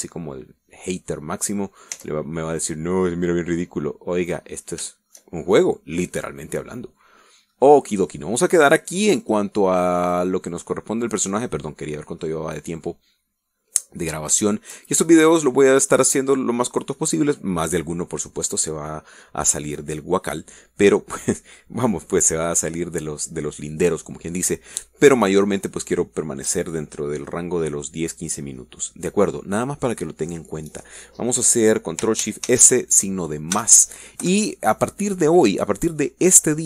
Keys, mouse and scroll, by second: 1.0-1.6 scroll down 1, 2.0 scroll down 1, 2.7 click, 3.2 Tab, 3.5 scroll down 1, 3.9-5.7 middle drag, 5.7-6.1 scroll down 1, 6.1 shift+middle click, 6.8 shift+middle click, 8.8-9.7 middle drag, 10.5 click, 10.8 middle click, 11.3 click, 12.1-12.9 middle drag, 12.9-13.4 scroll down 1, 13.5-15.3 middle drag, 15.4 scroll up 1, 15.7 shift+middle click, 16.5-18.6 middle drag, 33.8 ctrl+shift+s, 34.9 KP_Add, 35.5 KP_Enter.